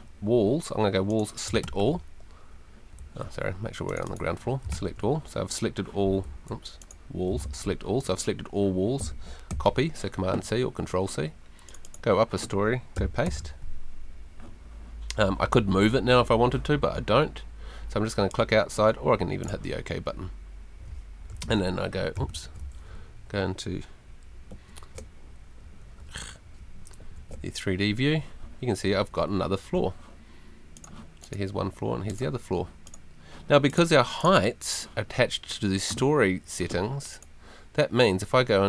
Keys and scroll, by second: 1.6 super+a, 3.0 Escape, 4.7 super+a, 6.2 Escape, 7.3 super+Escape, 7.4 super+a, 9.5 super+c, 13.2 super+v, 22.9 ctrl+super+F3, 23.6 ctrl+F3, 24.5 F3, 25.6 Escape, 27.0 F3, 28.9 Escape.